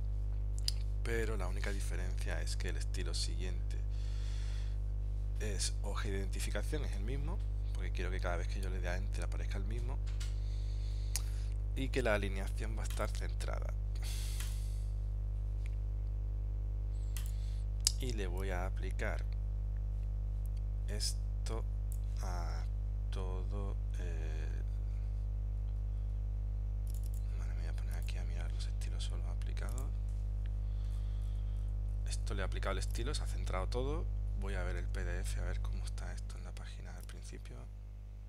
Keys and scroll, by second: 34.9 super+Tab.